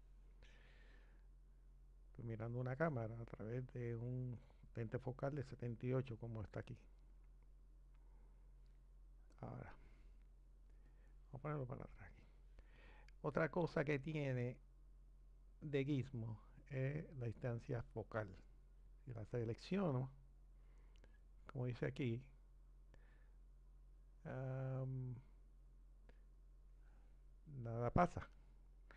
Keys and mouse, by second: 9.3 click, 11.0 click, 17.6-27.9 drag.